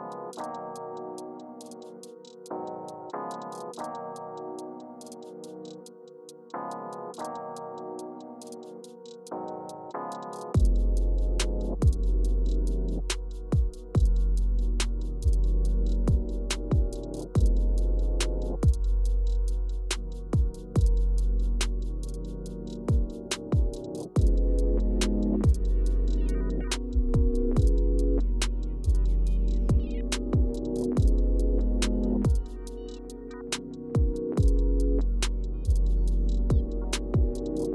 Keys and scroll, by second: 1.0-2.2 typing, 9.1 typing, 34.2-35.2 typing.